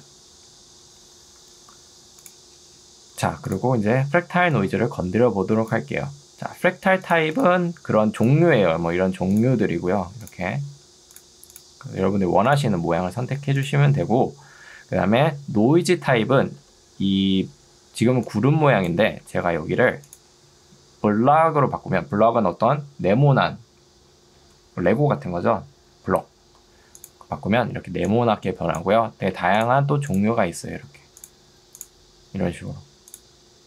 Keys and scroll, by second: 1.4 Escape, 4.2 ctrl+2, 19.4 Escape, 27.8 ctrl+2, 29.4 Escape.